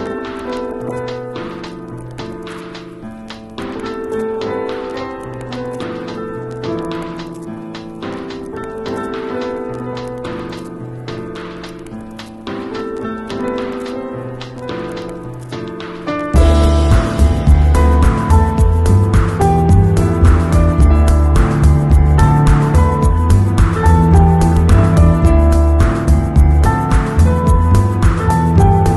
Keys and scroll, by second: 0.7 alt+Delete, 1.3 alt+super+Delete, 1.5 alt+super+d, 1.6 super+v, 2.5 v, 4.7 super+j, 9.4 super+s, 17.5 super+d, 17.8 super+space, 19.4 [, 23.9 [, 24.6 alt+[.